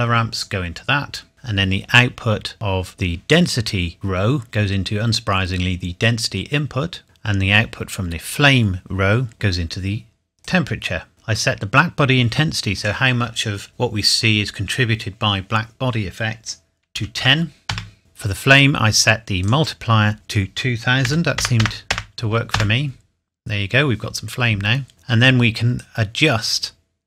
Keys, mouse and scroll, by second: 2.9 click, 10.4 click, 12.8 click, 16.9 KP_1, 17.2 KP_0, 17.7 KP_Enter, 19.4 click, 21.1 KP_2, 21.4 KP_0, 22.5 KP_Enter, 25.8 click.